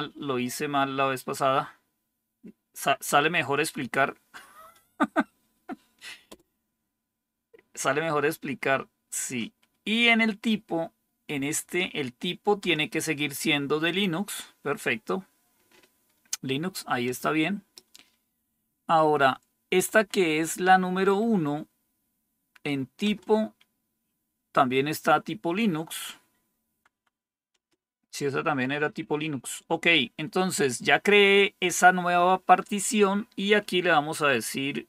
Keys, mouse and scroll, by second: 6.2 Return, 11.5 Right, 12.5 Return, 17.0 Return, 19.6 Up, 20.1 Up, 20.3 Up, 22.9 Return, 26.8 Down, 27.0 Down, 27.5 Return.